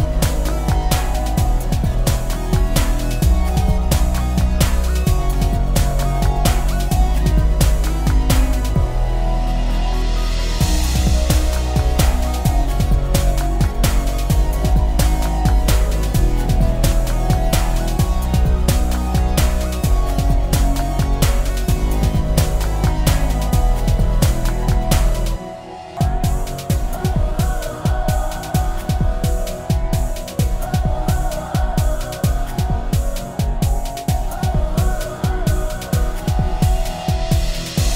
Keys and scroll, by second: 10.0 Delete, 14.1 ctrl+d.